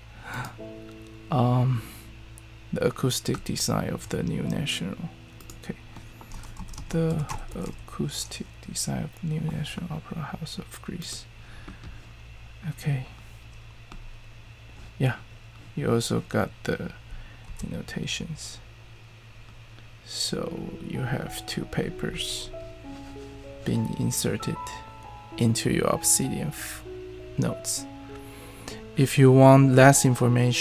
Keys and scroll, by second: 6.2-8.4 typing, 16.5-17.2 typing, 17.4 super+e.